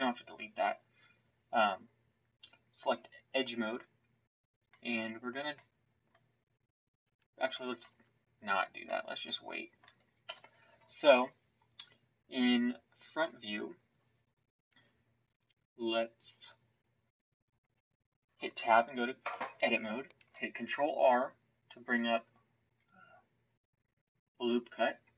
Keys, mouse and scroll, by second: 7.9 Tab, 10.2 KP_1, 13.4 Tab, 14.6 Tab, 20.1 ctrl+r.